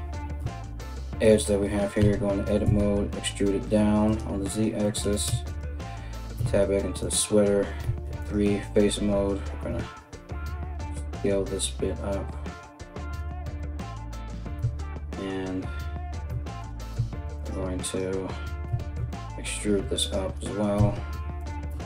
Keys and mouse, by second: 0.0 a, 1.6 e, 4.8 Tab, 5.0 right click, 5.2-6.6 middle drag, 6.0 Tab, 6.6 right click, 6.9 middle click, 7.4 3, 7.8 alt+right click, 8.0-21.0 alt+middle drag, 8.4 alt+s, 14.1 2, 15.9 Tab, 16.2 right click, 16.5 Tab, 17.0 alt+right click, 17.4 alt+right click, 18.2 e, 20.4 Tab, 21.0 right click, 21.1 middle click, 21.3 Tab, 21.7 alt+right click.